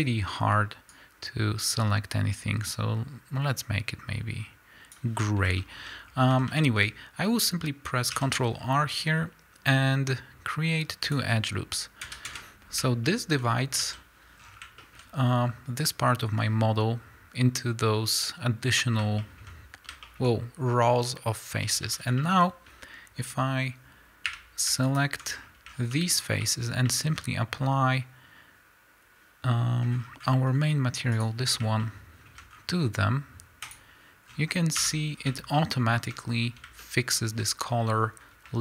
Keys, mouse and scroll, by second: 5.6 shift+middle click, 6.0-6.4 scroll up 2, 6.4 a, 8.1 ctrl+r, 12.4 KP_Enter, 13.0-24.9 shift+middle drag, 13.5-13.8 scroll up 2, 13.8 a, 14.4-14.8 scroll down 2, 19.5-20.0 scroll up 2, 21.7 a, 22.4-23.4 scroll up 2, 23.4-24.4 scroll up 1, 24.4 3, 24.9 alt+click, 25.3-26.0 scroll down 2, 26.0-31.1 shift+middle drag, 31.1 click, 31.8-33.9 shift+middle drag, 32.5-33.5 scroll up 2, 33.5-33.9 scroll up 1, 33.9-35.6 drag, 34.3-34.9 scroll down 2, 34.9 Tab, 35.1-35.6 scroll down 2, 35.6-38.6 shift+middle drag, 36.4-36.8 scroll up 2, 38.2-38.6 scroll up 2.